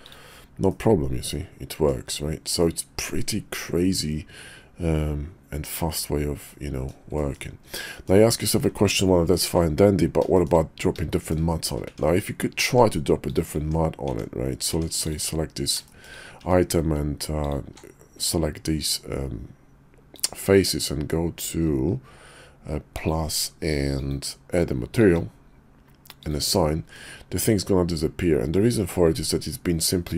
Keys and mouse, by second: 0.0 click, 0.7-1.9 middle drag, 2.6-5.9 middle drag, 6.5-6.8 middle drag, 7.2 shift+middle click, 7.9 middle click, 10.3 shift+middle click, 11.1 shift+middle click, 11.8 Tab, 12.9 Tab, 13.2 click, 13.6 Tab, 14.2 Tab, 14.7 Tab, 15.0 click, 15.9 shift+middle drag, 16.4 Tab, 17.4 alt+click, 20.1 click, 22.9 click, 23.9-25.2 drag, 26.2 click, 26.7 Tab.